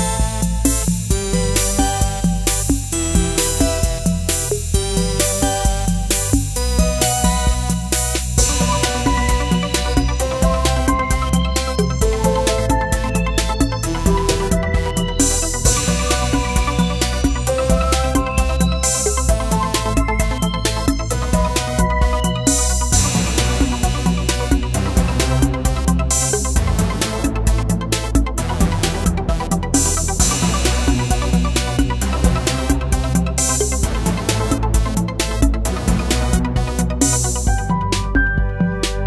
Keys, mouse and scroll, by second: 5.1 right click, 10.1 click, 12.1 right click, 13.9 click, 15.5 right click, 15.6 right click, 18.1-27.7 drag, 27.7-36.6 drag.